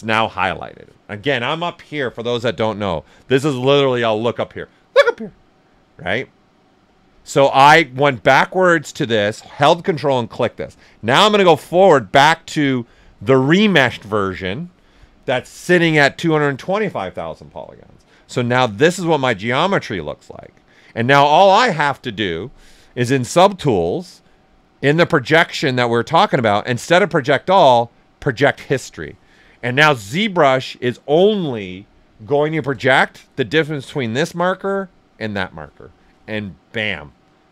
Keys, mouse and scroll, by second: 2.0 ctrl+click, 2.4 shift+m, 10.6-17.2 drag, 17.2 shift+m, 18.2 shift+f, 18.7-20.0 right drag, 20.0 alt+right click, 20.5 ctrl+right click, 22.7-28.2 drag, 32.3 click, 32.5 shift+f.